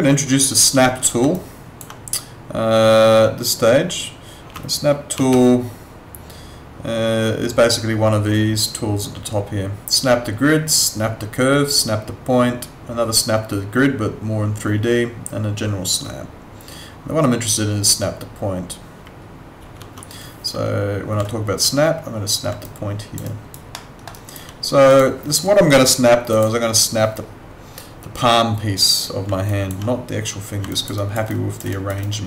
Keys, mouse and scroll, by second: 1.3 alt+click, 5.1 ctrl+4, 22.6 alt+click, 23.3 alt+right click, 23.7 alt+middle click, 24.1 alt+right click, 24.9 click, 29.5 alt+click, 30.7 alt+click, 30.9 alt+right click, 31.3 alt+click, 31.7 alt+right click, 32.0 alt+click.